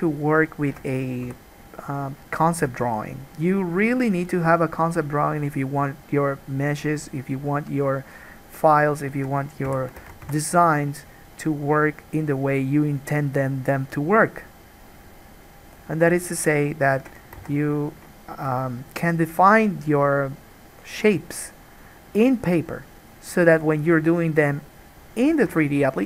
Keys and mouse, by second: 0.6 shift+middle click, 0.7-8.7 shift+drag, 1.5 f, 3.0 alt+a, 8.7 middle click, 8.9 shift+click, 9.1 shift+middle click, 9.2-11.7 shift+drag, 9.9 f, 10.3 alt+a, 10.4 1, 11.7 middle click, 11.8 click, 12.4 middle click, 12.7-15.9 drag, 15.9 middle click, 16.2 shift+click, 17.0 shift+middle click, 17.3-20.5 alt+drag, 17.7 alt+a, 20.5-26.0 middle drag, 25.5 alt+a.